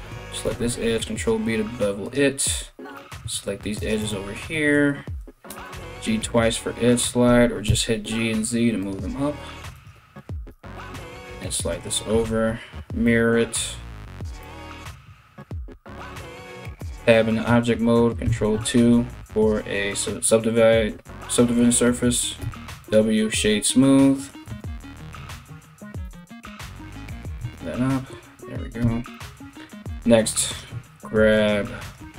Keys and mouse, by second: 0.3 ctrl+b, 2.0 right click, 3.4 shift+right click, 5.1 g, 6.9 g, 9.3 right click, 10.1 g, 11.8 alt+x, 16.4 Tab, 17.9 ctrl+2, 22.0 w, 24.1 Tab, 25.1 alt+right click, 25.6 g, 27.0 Tab, 28.4 Tab, 29.5 3, 30.1 right click, 31.0 ctrl+right click, 31.1 ctrl+middle click, 31.4 right click, 31.6 middle click.